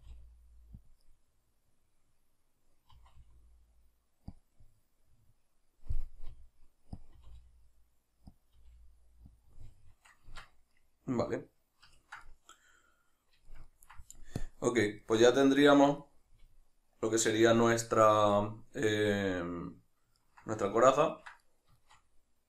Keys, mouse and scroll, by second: 0.9 click, 1.1-4.5 middle drag, 2.9 r, 4.5 click, 4.6-7.1 middle drag, 6.3 r, 7.1 click, 7.2 r, 8.4 click, 8.5 g, 9.4 click, 9.5-14.4 middle drag, 10.3 Tab, 14.4 click, 15.0-22.4 ctrl+middle drag.